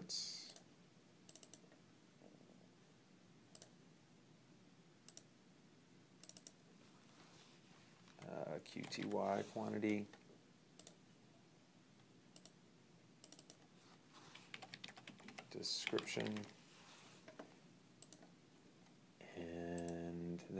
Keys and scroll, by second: 8.2-9.4 typing, 14.1-16.8 typing.